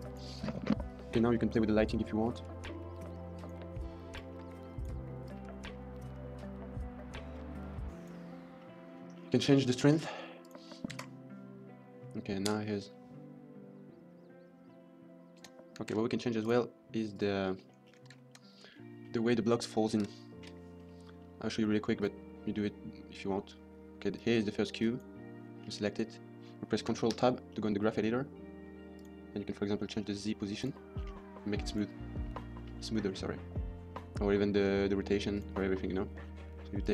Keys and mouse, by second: 1.7 middle click, 2.2-3.4 drag, 4.0 click, 5.2-7.8 drag, 7.8 right click, 8.5 middle click, 8.7 middle click, 9.3 middle click, 9.7 middle click, 9.8 middle click, 10.3 click, 12.4 space, 15.2 space, 15.9 ctrl+s, 16.3 right click, 17.4 middle drag, 18.0 shift+middle click, 18.6-18.9 middle drag, 21.0 middle click, 21.8 click, 24.7 click, 27.0 ctrl+Tab, 27.6 middle click, 28.8 click, 30.5 click, 31.6 click, 32.1 middle click, 35.2 click, 35.7 middle click.